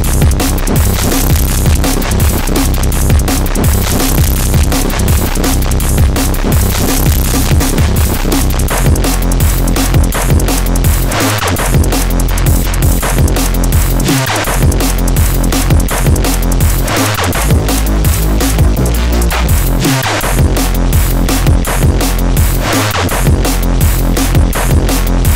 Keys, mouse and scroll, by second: 20.6 click, 22.1 click, 24.0 click, 24.8 click.